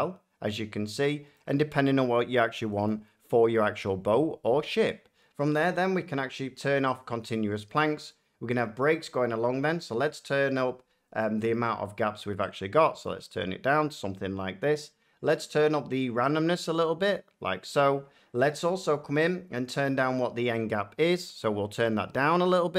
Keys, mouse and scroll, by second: 0.5 click, 1.3 middle click, 2.6 scroll, 2.8 shift+middle click, 6.9 click, 13.6 click, 15.7 click, 17.6-19.8 drag.